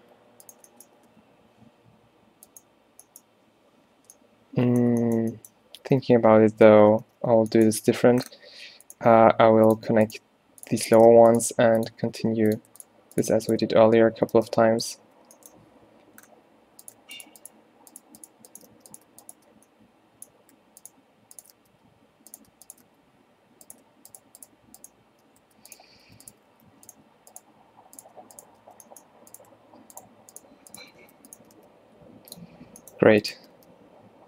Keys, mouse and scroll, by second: 0.1 g, 1.2 g, 6.0 ctrl+t, 6.2 ctrl+t, 6.8 ctrl+z, 7.0 ctrl+z, 7.3 ctrl+z, 7.8 ctrl+z, 9.1 g, 11.3 f, 11.5 g, 12.2 g, 14.4 f, 14.9 a, 15.2 a, 18.3 shift+right click, 18.8 f, 21.7 f, 23.0 f, 24.5 shift+right click, 26.6 alt+w, 28.7 f, 31.1 f, 31.5 g, 33.5 g.